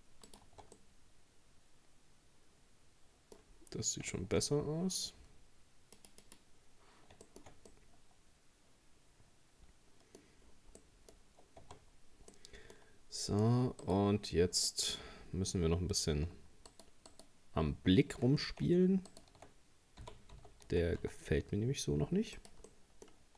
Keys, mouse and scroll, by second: 0.5 Tab, 0.8-3.6 middle drag, 3.6-4.1 scroll down 2, 4.1 shift+middle click, 4.4-4.9 scroll up 3, 6.0-7.3 drag, 7.3 shift+middle click, 7.6 scroll up 1, 7.7-10.5 middle drag, 10.5-10.8 scroll down 3, 10.8 middle click, 11.2-11.6 scroll up 1, 11.6 Tab, 11.9 scroll up 1, 12.3 middle click, 12.8-13.4 scroll up 2, 13.8 right click, 14.2-14.7 scroll down 2, 14.7-16.7 middle drag, 16.7 shift+right click, 17.1 shift+right click, 19.1 shift+right click, 20.0 g, 22.7 middle click, 23.2-23.3 scroll up 2.